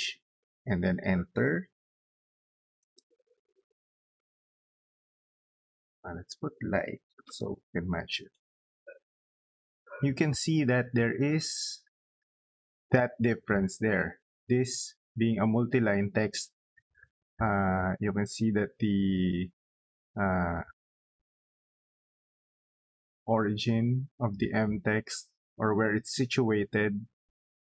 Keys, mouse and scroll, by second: 1.2-2.5 typing, 5.8 click, 6.7 l, 7.0 i, 7.8 space, 9.1 click, 9.7 middle click, 10.0 scroll up 2, 10.6 middle click, 11.4 middle click, 12.1 scroll down 2, 12.5 scroll up 2, 12.7 middle click, 13.9 click, 16.6 middle click, 24.0 middle click.